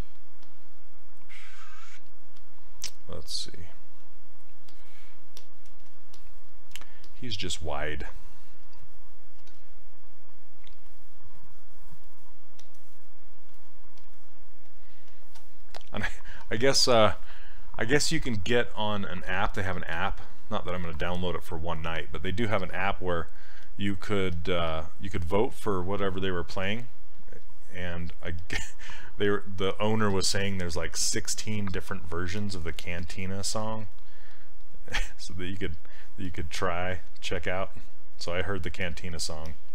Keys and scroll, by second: 9.4 s, 38.8 s.